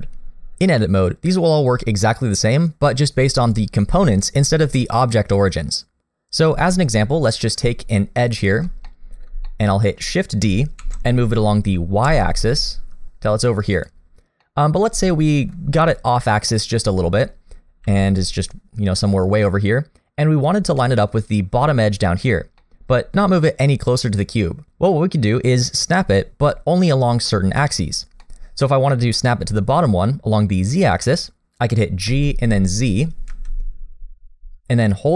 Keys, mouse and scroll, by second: 3.5 click, 4.0 click, 5.0 click, 8.3 shift+click, 8.9 middle click, 9.5 shift+middle click, 10.8 shift+d, 14.1 scroll down 1, 14.4 middle click, 15.0 shift+middle click, 16.5 middle click, 17.8 g, 20.8 middle click, 22.6 middle click, 28.2 middle click, 32.1 g.